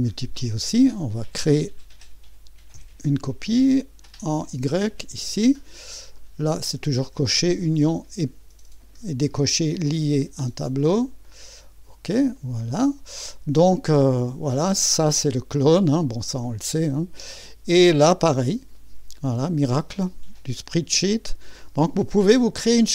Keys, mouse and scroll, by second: 0.6 click, 1.5-6.0 drag, 6.1 click, 7.1 click, 9.7-10.7 drag, 11.3 click, 12.4 click, 14.3 click, 19.9 click.